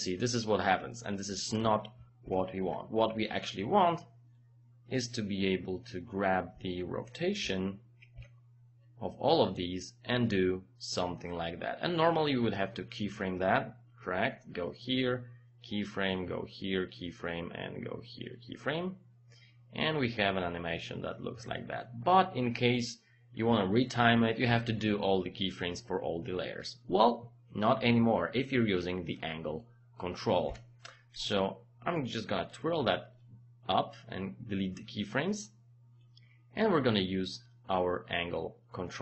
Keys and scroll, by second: 2.3 ctrl+z, 7.4 r, 8.1 r, 30.5 Delete.